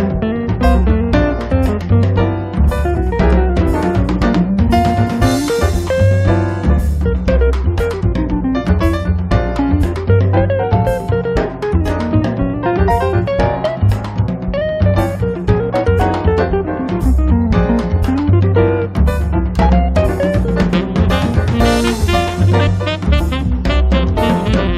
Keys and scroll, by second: 0.4 p, 1.7 1, 2.0 0, 2.2 Return, 2.9 space, 3.4 Escape, 14.2 Escape, 22.4 b.